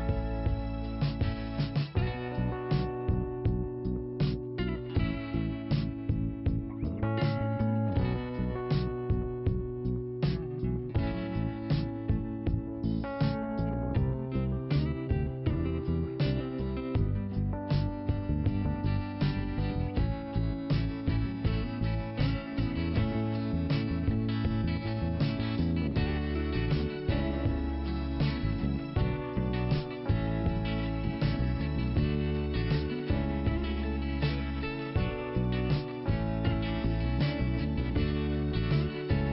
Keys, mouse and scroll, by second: 0.6 click, 2.4-2.9 scroll up 2, 3.4 click, 7.6 middle click, 9.2 click, 9.8 middle click, 10.4 click, 11.8 click, 14.4 click, 16.4 click, 18.4-19.3 scroll down 1, 19.6 click, 20.7 click, 22.1 click, 22.3 right click, 23.2 click, 25.2 click, 26.0 click, 27.0 click, 29.2 click, 30.2 click, 31.6 click, 33.2 click, 33.9 click, 36.2 click.